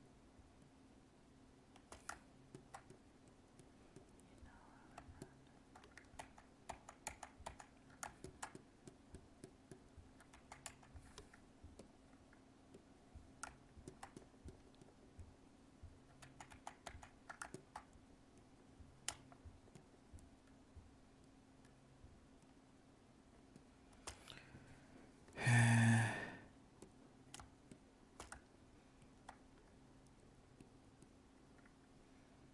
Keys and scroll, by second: 6.1 ctrl+z, 16.2 ctrl+z.